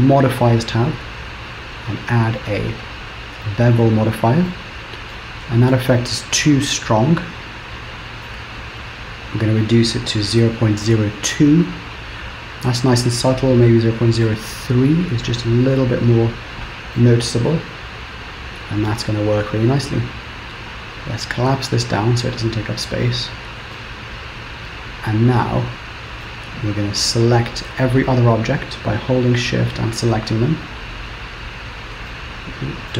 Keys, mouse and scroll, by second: 0.2 click, 1.8 click, 4.6 middle click, 5.8 shift+middle click, 6.4 middle click, 9.5 click, 13.0 click, 17.1 middle click, 21.4 click, 22.7-23.4 scroll down 7, 23.8 shift+middle click, 25.5 middle click, 27.3 click, 28.0 shift+click, 28.6 click, 29.3 shift+click, 29.7 shift+click, 30.7 shift+click, 32.1 shift+scroll down 1, 32.2 shift+middle click.